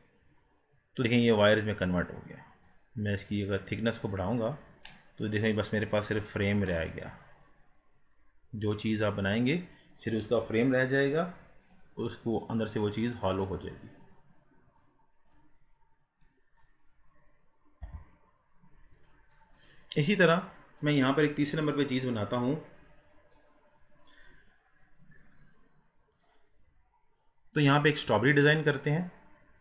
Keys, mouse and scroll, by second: 1.3-3.7 middle drag, 3.7-6.8 drag, 7.3-15.8 middle drag, 15.8 scroll down 4, 16.3 click, 17.9 g, 19.4 click, 19.9-20.7 middle drag, 20.7 scroll up 1, 21.3-29.6 middle drag.